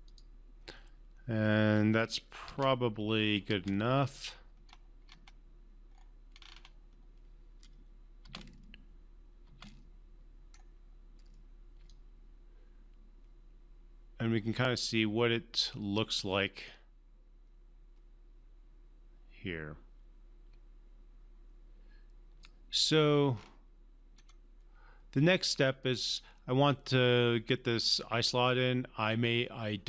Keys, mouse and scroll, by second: 2.4 space, 2.9 space, 4.7-5.9 scroll up 1, 5.9 scroll down 1, 6.3 scroll up 1, 8.2 space, 10.5-11.7 scroll down 1, 11.8-22.5 alt+drag, 23.3-24.1 scroll up 2, 24.1-24.7 scroll down 2.